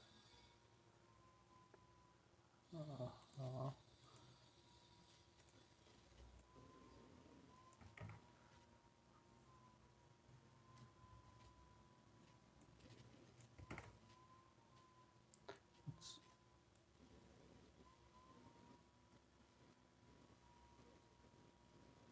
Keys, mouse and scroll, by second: 8.0 ctrl+z, 13.7 ctrl+z.